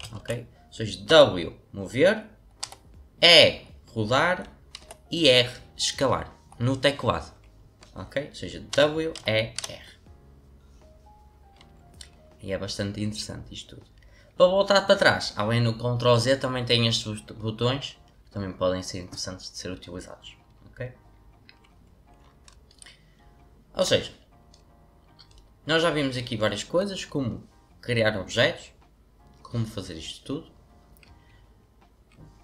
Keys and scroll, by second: 0.1 ctrl+z, 1.0 w, 2.6 e, 4.8 r, 8.4-10.0 typing, 13.0-13.7 typing.